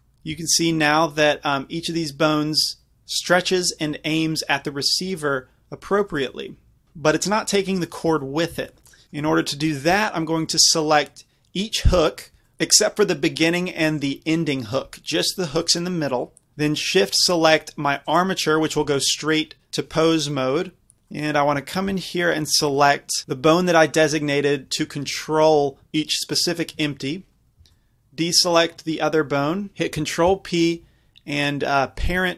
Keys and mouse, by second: 0.3 g, 6.2-6.8 right drag, 8.8 ctrl+z, 8.8-11.2 drag, 11.2 middle click, 11.9 click, 13.9-16.5 drag, 18.1-19.7 drag, 21.9-23.5 middle drag, 23.5-27.7 drag, 27.7 b, 30.3 ctrl+p.